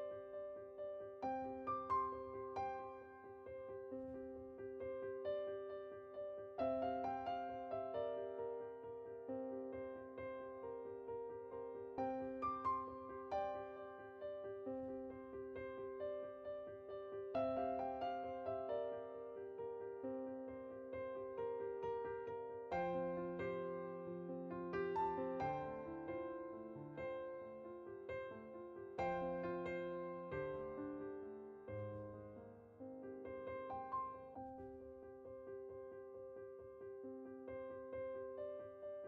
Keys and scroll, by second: 8.6 typing, 16.0 typing, 17.9 typing, 37.8 typing.